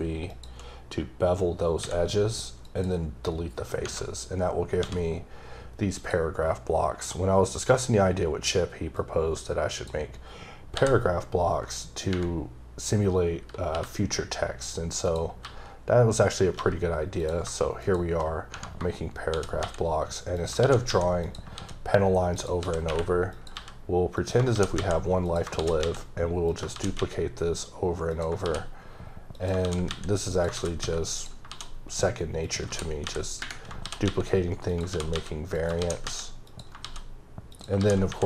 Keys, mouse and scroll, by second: 0.3 shift+click, 1.8 x, 2.6 click, 3.7 scroll up 2, 6.0 click, 9.0 click, 10.7 ctrl+c, 15.0 click, 15.4 g, 16.2 click, 16.6 g, 17.2 click, 18.5 Tab, 20.3 click, 20.6 d, 21.2 click, 22.3 click, 22.6 s, 23.3 click, 23.5 g, 24.2 click, 24.5 shift+d, 25.2 click, 25.6 shift+d, 26.5 click, 26.7 shift+d, 28.3 shift+click, 28.5 shift+d, 29.3 click, 29.6 d, 30.3 click, 30.5 d, 31.1 click, 31.5 d, 32.4 click, 32.6-35.8 typing, 34.7 click, 35.5 click, 36.5 click, 36.8 shift+d, 37.5 click, 37.8 shift+d.